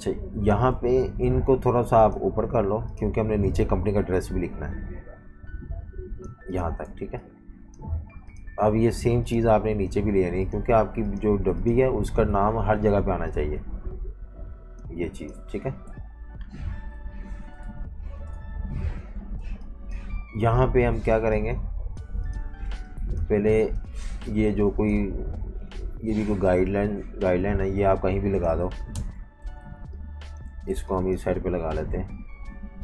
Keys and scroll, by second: 0.0-0.7 typing, 6.9-8.6 typing, 9.7 super+3, 10.7 super+3, 11.3 super+3, 11.8 super+3, 15.9 v, 17.0 super+-, 17.6 v, 18.3 super+-, 19.1-20.4 typing, 22.2-23.7 typing, 28.9 shift+super+], 29.4-32.3 typing.